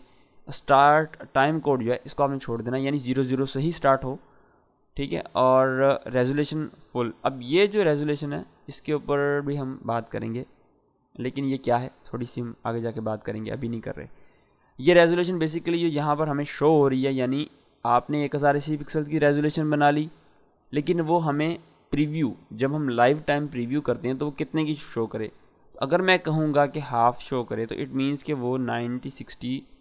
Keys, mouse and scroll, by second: 5.9 click, 14.8 click, 26.4 click.